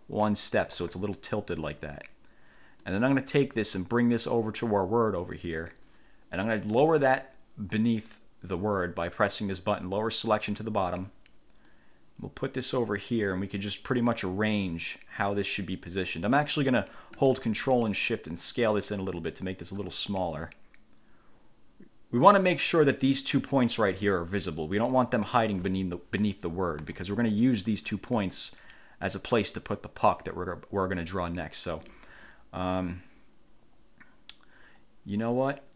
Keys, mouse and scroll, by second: 3.0-6.1 drag, 10.5 click, 11.9-16.7 drag, 18.5-20.1 ctrl+shift+drag, 20.4-22.7 ctrl+shift+drag, 24.9 click, 27.0 ctrl+z, 28.5-35.7 drag.